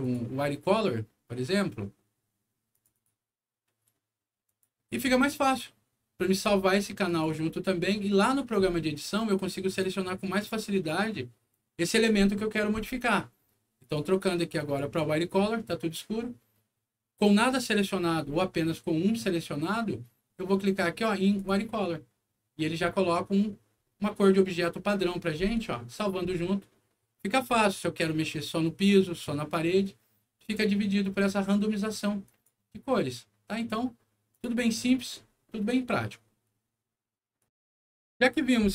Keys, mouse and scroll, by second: 2.6 click, 2.9 click, 4.4 click, 7.0 click, 9.7 click, 11.4 click, 13.7 click, 14.5 click, 21.3 click, 28.1 scroll up 2, 29.0 scroll down 2, 32.2 click, 34.2 click, 37.3 click.